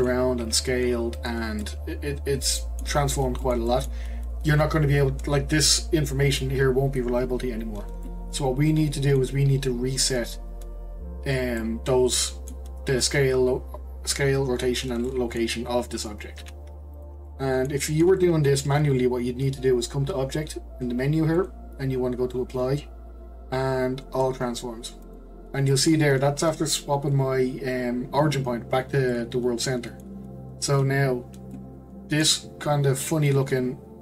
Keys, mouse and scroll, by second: 0.4 s, 1.6-2.8 middle drag, 2.8 scroll down 1, 3.0-3.4 scroll up 1, 3.4-6.7 shift+middle drag, 8.0-11.1 middle drag, 11.6-14.6 middle drag, 15.1-16.4 middle drag, 16.4 g, 17.2-21.3 middle drag, 21.4-24.5 drag, 25.7-28.8 middle drag, 29.1-33.2 middle drag, 33.2 click.